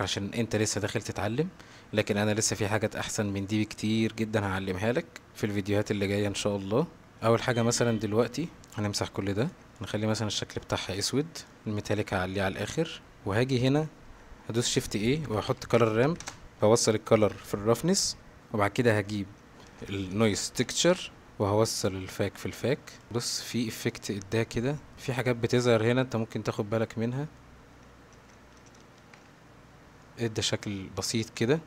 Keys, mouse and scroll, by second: 1.7-4.6 middle drag, 7.1 middle click, 8.8 click, 9.6 x, 11.4 click, 12.6-13.1 drag, 14.7 shift+a, 16.6-17.9 drag, 18.8 middle click, 20.3 shift+a, 22.1 click, 23.1-23.5 middle drag, 23.6 shift+middle drag, 24.6-24.9 middle drag, 24.9 ctrl+z, 26.3-27.4 middle drag, 28.3 ctrl+z, 29.0 ctrl+shift+z, 30.0-30.4 middle drag, 31.2 middle drag.